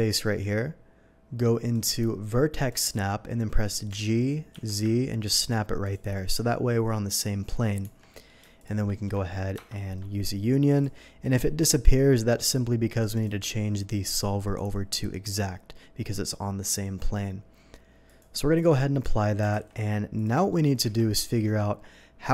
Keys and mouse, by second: 2.5-6.1 drag, 3.9 g, 4.5 z, 4.7 g, 4.9 g, 7.8 Tab, 8.6 shift+Tab, 9.5 ctrl+KP_Add, 10.1-21.4 drag, 19.5 alt+v, 20.8 Tab.